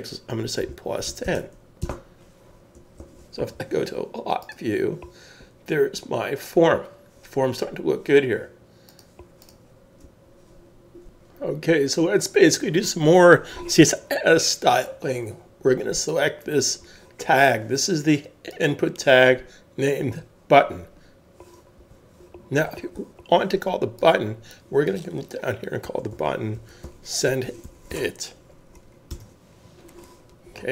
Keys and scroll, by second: 0.6 +, 1.0 1, 1.8 Return, 3.0 super+s, 25.8-27.9 typing, 29.1 Return, 29.1 typing.